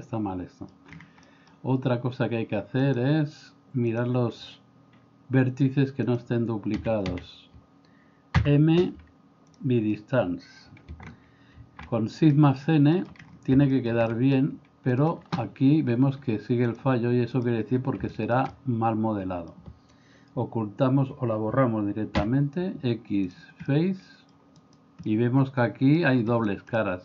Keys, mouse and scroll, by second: 1.3 middle click, 2.9-4.1 drag, 6.8 a, 7.1 a, 8.4 m, 11.6 shift+n, 12.3 middle click, 13.7 middle click, 14.2 middle click, 16.7 click, 18.1-19.5 shift+middle drag, 22.2 x, 23.6 middle click, 25.1 middle click, 26.8 middle click.